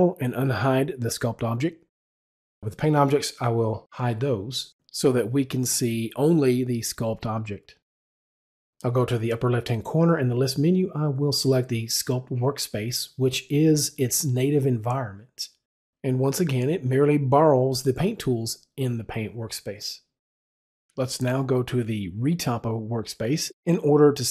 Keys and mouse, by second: 1.3 click, 2.6 click, 11.8 click, 13.7 click, 22.2 click, 23.3 click.